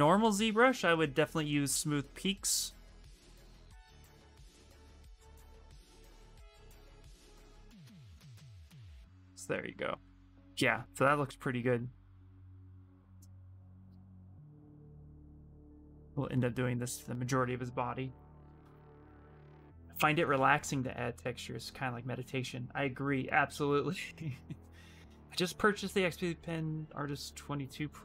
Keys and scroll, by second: 12.6 Return, 12.8 Return.